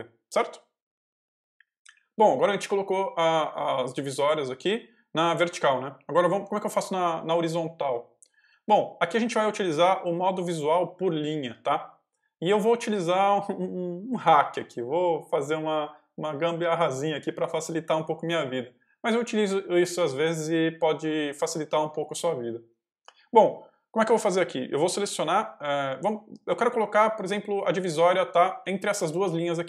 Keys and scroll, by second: 1.8 0, 28.0-29.6 typing.